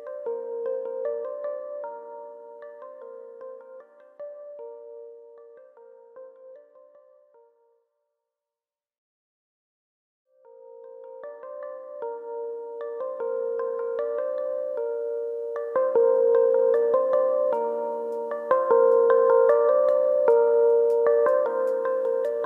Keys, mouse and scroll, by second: 0.0 s, 1.4 click, 1.7 middle click, 3.1-3.6 scroll down 2, 3.3 shift+middle click, 3.6 middle click, 3.9 shift+middle click, 4.4 middle click, 5.4 Tab, 5.8 click, 6.5 KP_1, 6.7 Tab, 7.1-7.7 scroll up 3, 7.4 shift+middle click, 7.7 middle click, 9.0 KP_3, 10.7 3, 10.9 click, 11.4 shift+click, 11.9 shift+click, 12.3 middle click, 13.9 middle click, 16.3 click, 16.7 middle click, 17.1 middle click, 18.7 click, 19.0 middle click, 19.5 middle click, 20.1 KP_1, 21.7 e.